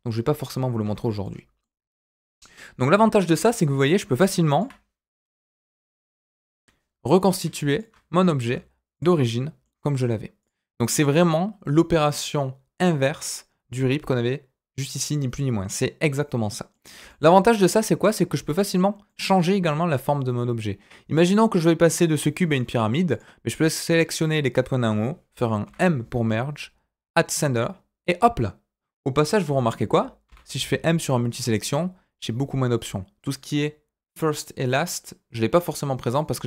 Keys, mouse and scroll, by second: 0.8 ctrl+z, 1.2 middle click, 1.8 Tab, 3.3 Tab, 3.8 click, 4.5 shift+click, 5.2 m, 7.2 click, 7.7 shift+click, 8.4 m, 9.2 middle click, 10.4 click, 16.1 middle click, 17.0 middle click, 18.2 click, 19.0-21.3 middle drag, 23.1 click, 23.5 middle click, 23.9 click, 25.6 m, 29.4 ctrl+z, 30.2 m, 35.6 click, 36.1 click.